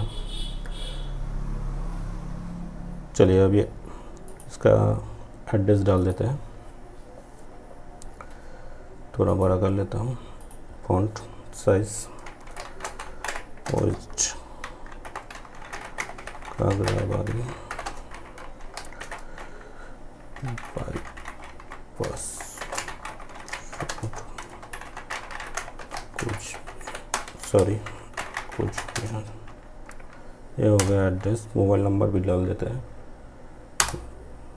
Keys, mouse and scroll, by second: 3.3 click, 8.3 click, 12.7 space, 15.8 typing, 16.9 space, 19.4 y, 22.9 space, 27.9 space.